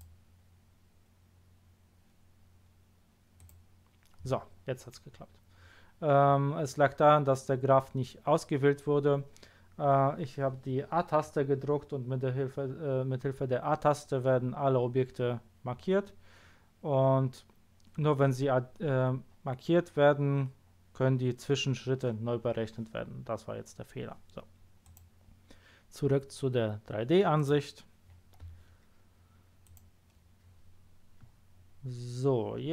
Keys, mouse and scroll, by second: 3.3 click, 5.0 scroll down 1, 5.5 scroll up 1, 24.8 click, 27.3 click, 29.6 click.